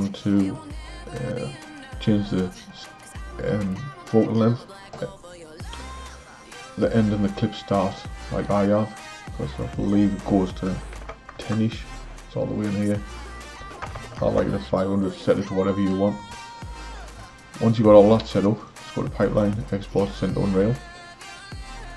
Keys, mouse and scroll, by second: 9.7-13.9 drag, 13.9 KP_0, 18.6-21.9 drag.